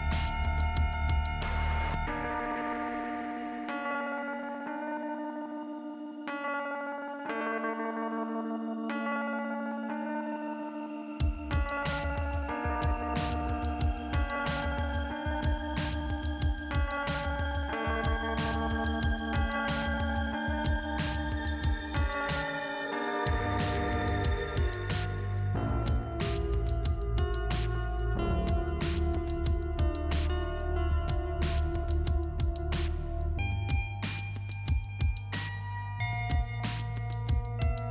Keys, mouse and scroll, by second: 0.6 shift+Return, 1.4 click, 2.8 click, 3.9 click, 5.9 click, 7.9 shift+Return, 8.8 click, 10.2 click, 11.4 click, 13.9 click, 15.6 click, 19.2 click, 20.9 click, 22.2 click, 23.6 click, 25.2 click, 27.1 click, 27.9 click, 28.7 click, 28.8 click, 29.9 click, 31.2 click, 31.7 click, 32.7 click, 34.4 click, 34.5 click, 34.7 double click, 34.8 double click, 36.2 click, 36.7 scroll down 1, 37.4 click.